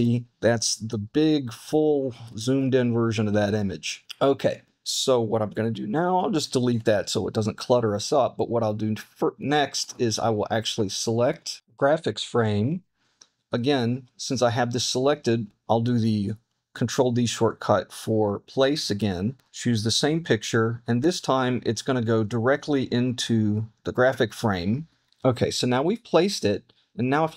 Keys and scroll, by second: 0.0 super+=, 0.2 super+=, 2.6 super+-, 3.5 super+-, 4.0 super+=, 6.7 BackSpace, 11.3 super+=, 15.5 super+d, 25.0 super+z.